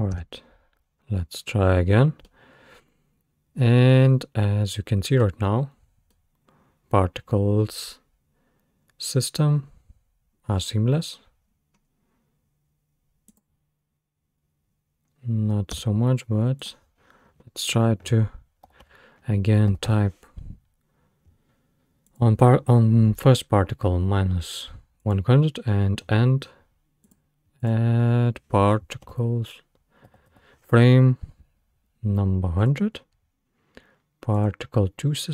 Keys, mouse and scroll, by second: 0.1 space, 1.1-1.4 scroll down 1, 2.3-5.3 middle drag, 5.4-5.9 scroll down 2, 5.9 scroll up 1, 6.1-9.2 middle drag, 11.0 middle click, 11.0-11.5 scroll down 3, 11.5-13.3 scroll up 3, 13.3 click, 15.7 space, 16.6-19.7 drag, 19.9 0, 25.0-27.2 drag, 27.6-30.3 drag, 30.3 0, 31.8-33.3 middle drag, 34.4 click.